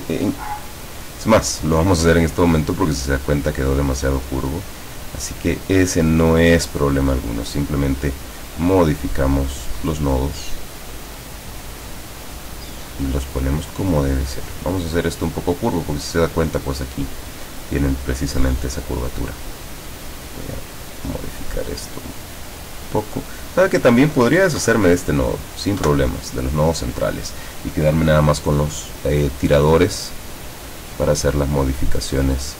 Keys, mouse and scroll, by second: 1.1 click, 3.3 click, 5.0-6.2 drag, 6.8 click, 8.3-9.9 drag, 10.5-11.7 drag, 13.9-15.4 drag, 17.5-19.3 drag, 20.1 click, 21.4-23.3 drag, 23.6 click, 24.6 Delete, 25.5 click, 25.9 Delete, 30.9-32.5 drag.